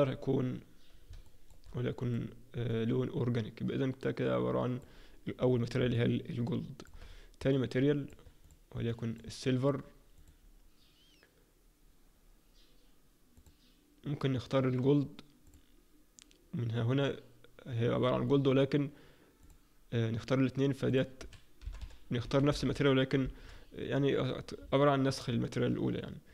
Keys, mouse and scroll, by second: 1.3 shift+middle click, 2.0 click, 5.5-5.9 scroll down 4, 5.9 middle click, 7.0-7.4 scroll up 3, 7.5 alt+middle click, 8.4 click, 8.8 alt+middle click, 10.2 click, 20.8 click, 23.9-24.6 scroll down 1, 24.6 scroll down 7, 24.8 shift+middle click, 25.5-26.3 scroll up 1.